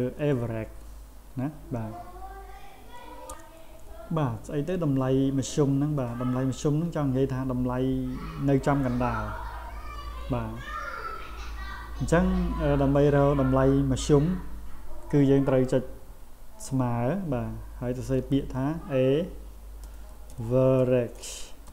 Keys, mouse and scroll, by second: 18.1 shift+a, 19.6-21.7 typing.